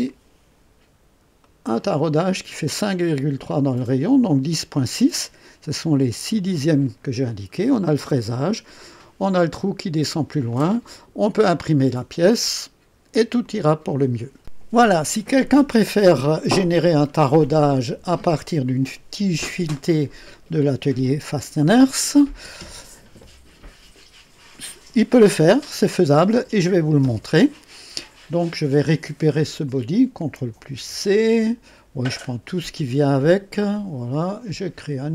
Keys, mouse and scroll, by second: 0.0 right click, 0.9 scroll up 1, 1.4 right click, 7.1 scroll down 2, 8.2 scroll down 2, 8.7 right click, 9.9-10.2 scroll down 1, 10.5-11.6 drag, 13.4 click, 29.6 click, 30.6 ctrl+c, 33.7 click, 34.8 click.